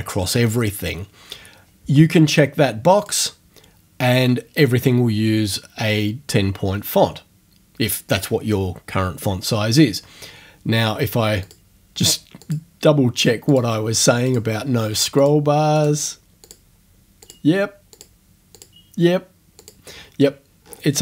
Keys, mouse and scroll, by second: 3.0 click, 11.4 click, 12.4 click, 13.5 click, 14.3 click, 15.2 click, 15.8 click, 16.4 click, 17.2 click, 18.0 click, 18.6 click, 19.6 click, 20.6-21.0 scroll down 1.